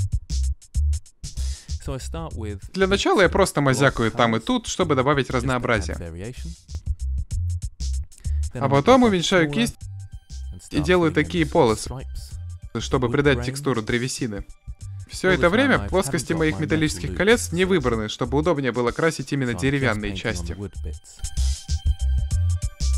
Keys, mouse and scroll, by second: 0.2 n, 0.4 shift+space, 2.6-5.6 typing, 6.2 middle click, 6.7 middle click, 7.8 middle click, 8.2 f, 9.0 ctrl+z, 9.9 f, 10.3-14.4 middle drag, 14.5 f, 14.7 middle click, 15.6 drag, 16.0 click, 16.2-18.2 middle drag, 18.2 drag, 18.4 middle click, 19.1 click, 19.9-20.4 middle drag, 20.4 ctrl+z, 20.5 ctrl+z, 21.1 click, 21.4-22.9 drag, 21.4 f.